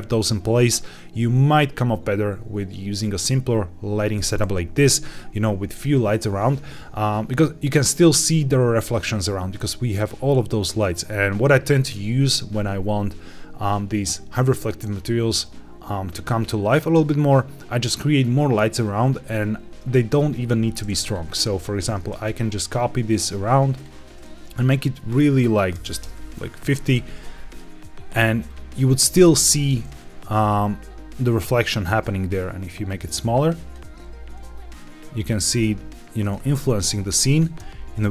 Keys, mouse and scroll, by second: 5.9-9.0 scroll down 2, 20.9 click, 21.8 shift+d, 22.0 shift+z, 23.7 click, 24.5-25.9 drag, 27.0 g, 27.0 z, 28.4 click, 29.9 g, 31.6-32.9 drag, 33.9 g, 36.1 click, 36.3 g, 36.3 z, 37.2 click, 37.5 g.